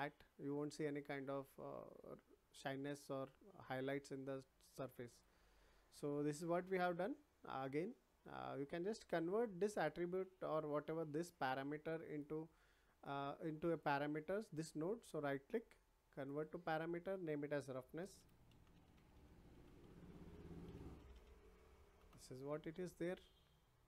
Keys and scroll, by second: 18.1 shift+r, 18.5 o, 19.6 r, 20.1 BackSpace, 20.6 e, 22.0 Return.